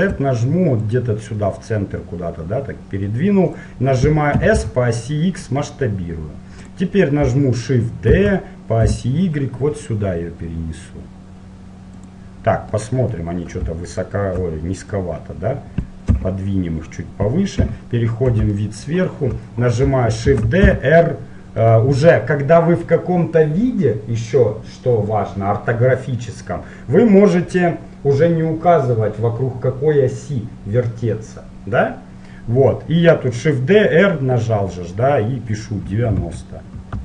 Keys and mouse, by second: 0.0-1.0 middle drag, 1.5-2.8 drag, 4.5 s, 8.2 shift+d, 13.0-14.0 middle drag, 14.0-15.9 right drag, 15.2-17.8 drag, 16.3 KP_1, 17.8 KP_7, 18.8 middle click, 20.4 shift+d.